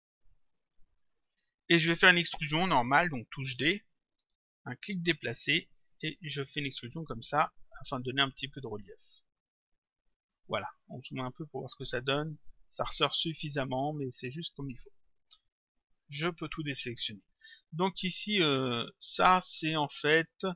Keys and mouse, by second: 0.4 click, 3.6 d, 5.0 click, 15.9 click.